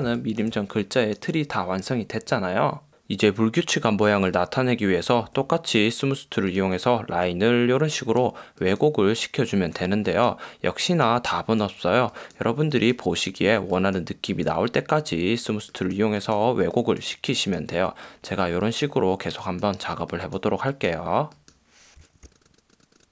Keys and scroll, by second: 0.3 space, 21.7-23.1 typing.